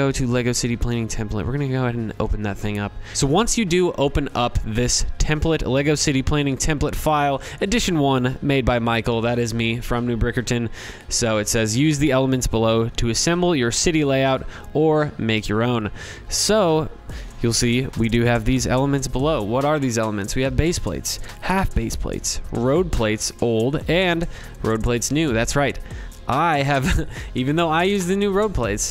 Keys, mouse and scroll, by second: 15.5-20.7 middle drag, 15.5 scroll.